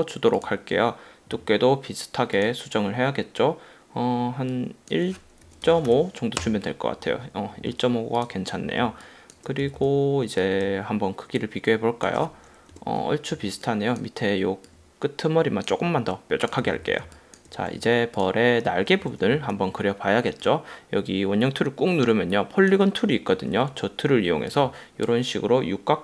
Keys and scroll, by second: 5.5 1, 6.0 5, 6.5 Return, 8.9 space, 9.7 v, 12.8 BackSpace, 13.6 a, 16.7 v, 17.2 space.